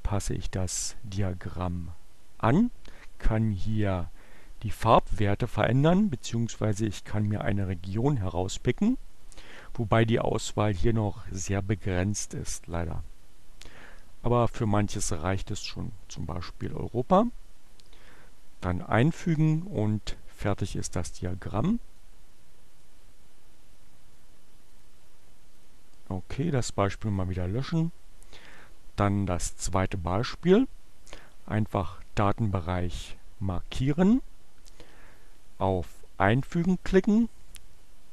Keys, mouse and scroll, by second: 8.4-9.6 drag, 18.6 click, 21.7 click, 24.4 click, 25.4 click, 26.9 click, 28.4 click, 29.3-31.8 drag, 35.4 click, 37.9-38.1 drag.